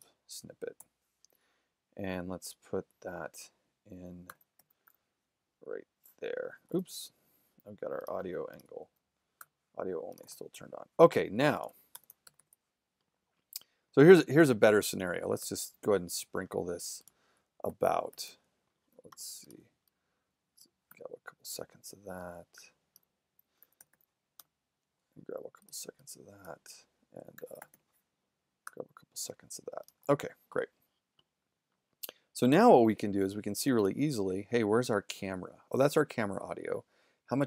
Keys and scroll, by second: 0.8 o, 4.3 super+2, 4.6 super+', 4.9 w, 7.8 super+z, 9.4 w, 10.2 shift+w, 12.3 super+=, 17.7 ', 19.3 alt+', 20.9 w, 23.6 alt+super+2, 23.8 super+', 24.4 w, 27.6 super+2, 27.6 super+', 28.7 w, 30.0 shift+z.